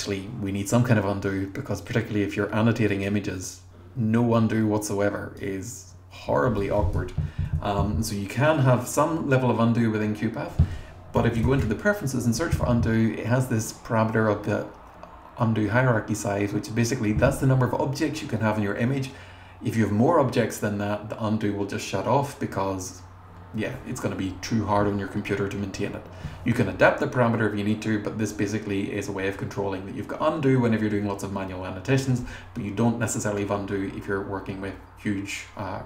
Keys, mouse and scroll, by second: 2.9 click, 6.6 click, 7.5 BackSpace, 10.9-12.1 typing.